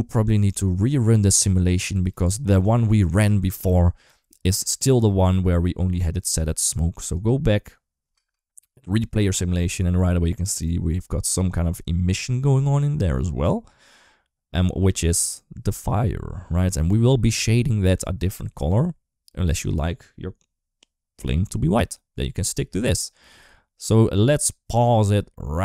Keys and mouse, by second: 8.3 space.